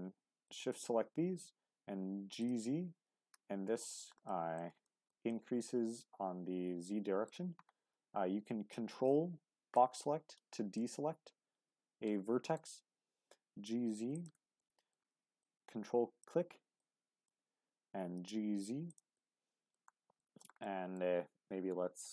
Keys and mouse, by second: 0.5 shift+click, 1.4 z, 2.4 click, 2.9 g, 3.1 z, 3.8 shift+click, 4.3 click, 4.9 shift+click, 5.3-7.3 drag, 8.8-9.8 ctrl+drag, 10.8-12.6 middle drag, 12.9 z, 14.1 shift+click, 14.6 middle click, 15.4-17.4 ctrl+drag, 18.2 z, 18.9 click, 19.2 middle click, 20.2 shift+middle click, 20.6 middle click.